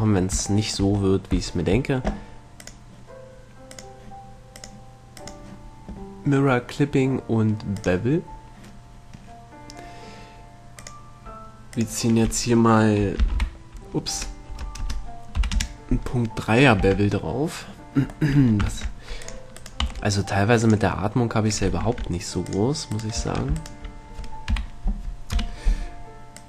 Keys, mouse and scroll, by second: 1.1-4.0 middle drag, 2.9-4.6 drag, 4.8-7.3 drag, 11.0-13.9 drag, 17.1 Tab, 18.5 middle click, 19.0 ctrl+Tab, 19.8 right click, 20.1 x, 22.1 ctrl+Tab, 23.1-25.3 right drag, 24.9 KP_3, 25.7 KP_1.